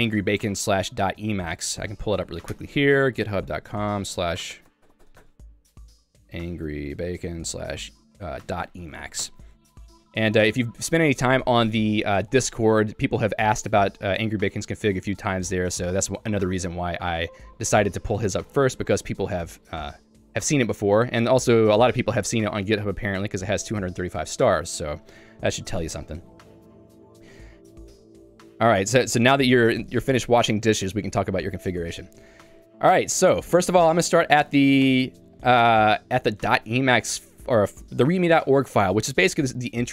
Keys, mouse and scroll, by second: 0.6 super+o, 27.2 click, 27.9 Escape, 32.3 k, 32.4 k, 34.0 j, 35.0 Return, 36.3 shift+Tab, 36.6 shift+Tab.